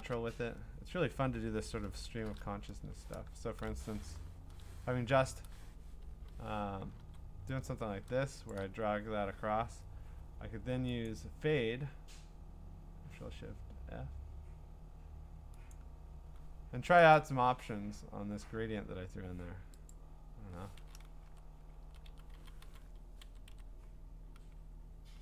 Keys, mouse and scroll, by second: 2.1 alt+shift+f, 4.2 F5, 6.3 Escape, 7.0 g, 8.5 shift+click, 11.1 click, 15.7 click, 17.2 click, 19.9 click, 21.8-22.9 scroll.